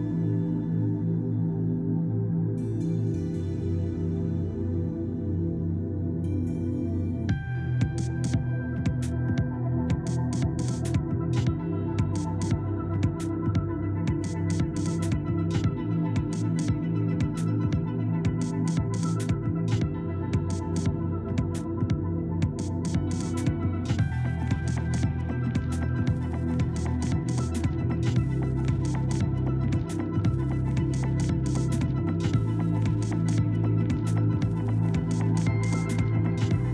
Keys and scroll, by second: 2.3 ctrl+z, 5.4 Escape, 20.1 2, 20.4 Return, 33.3 Escape.